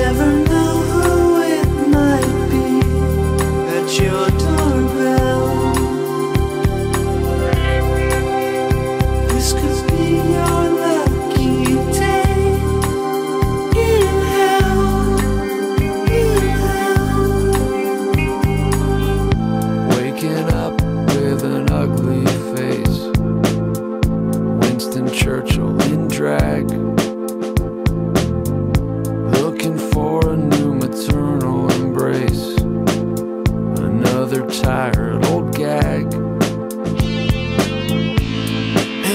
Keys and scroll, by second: 27.7 alt+scroll, 28.4-29.1 alt+scroll.